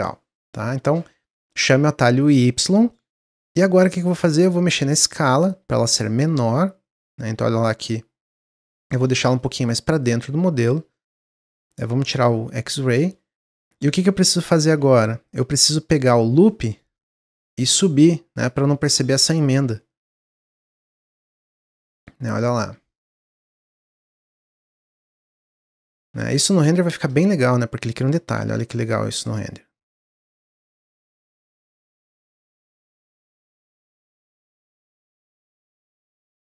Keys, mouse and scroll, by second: 0.8 ctrl+z, 2.8 middle click, 3.7 s, 6.0-7.2 middle drag, 7.2 click, 9.2 middle click, 9.9 click, 10.9 middle click, 11.1-11.8 scroll up 1, 12.1 click, 12.5 scroll up 1, 12.7 middle click, 13.1 scroll down 1, 13.4-14.6 middle drag, 14.6 2, 15.2 click, 15.7 alt+click, 16.4-17.9 middle drag, 17.9 click, 18.7 middle click, 19.4 alt+click, 20.3 click, 21.5 middle click, 22.0-22.3 scroll down 1, 22.3 middle click, 22.7 Tab, 22.9-23.3 middle drag, 23.3 click, 23.6-25.0 middle drag, 25.0 scroll down 2, 25.3-25.7 middle drag, 25.7-26.5 scroll up 1, 27.0 click, 29.0-31.9 middle drag, 31.9 click, 32.2-33.3 middle drag, 33.3 drag, 33.6 middle click, 33.9-34.2 scroll up 2, 34.2 Tab, 34.8 middle click, 35.2 Tab, 35.5 scroll down 1, 35.7-36.5 middle drag.